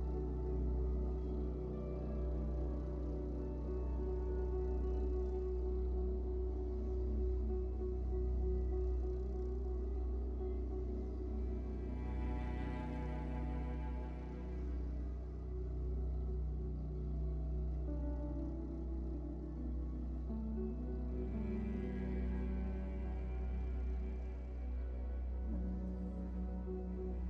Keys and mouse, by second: 0.0-7.0 typing, 1.2 KP_Subtract, 1.3 KP_Divide, 1.6 KP_Divide, 1.6 Tab, 1.9 KP_Divide, 2.2 middle click, 2.3 click, 2.9 Tab, 3.2 KP_Divide, 4.2 ctrl+z, 4.7 click, 5.2 middle click, 5.4-6.7 drag, 7.3 click, 9.4 click, 9.4-13.1 typing, 9.7 alt+a, 12.2 alt+a, 12.5 click, 13.3 alt+a, 13.3 middle click, 13.6 click, 14.3 middle click, 14.4 KP_3, 15.0 Tab, 15.0 click, 15.1 g, 15.6 ctrl+z, 15.7 g, 15.8 Tab, 15.9 alt+h, 16.0 alt+a, 16.1-17.6 drag, 16.7-18.7 typing, 17.6 middle click, 17.6 Tab, 17.8 alt+a, 17.9 click, 19.0 Tab, 19.2 alt+a, 19.6-20.1 Tab, 19.7 click, 20.3 g, 20.4 click, 20.6 Tab, 20.8 alt+a, 21.0 KP_3, 21.5 middle click, 21.5 click, 21.6 r, 21.7 alt+a, 21.9-23.1 middle drag, 22.0 z, 23.1 click, 23.5-25.5 typing, 25.0 Tab, 25.2 Tab, 25.7 alt+a, 26.1 click, 26.2 middle click, 26.2-27.2 drag.